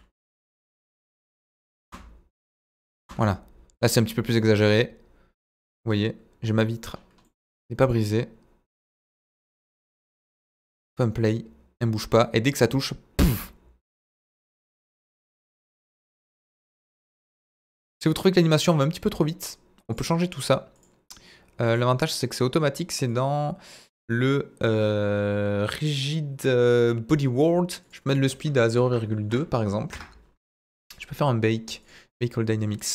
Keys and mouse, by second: 0.1 s, 0.8 click, 1.0 Tab, 1.6 Tab, 1.8 space, 3.0 space, 3.8-5.7 drag, 5.9 middle click, 7.2 middle click, 9.2-10.3 middle drag, 11.3-18.4 drag, 20.0 click, 23.2 click, 27.9-30.3 drag, 30.8 click, 31.8-32.9 drag.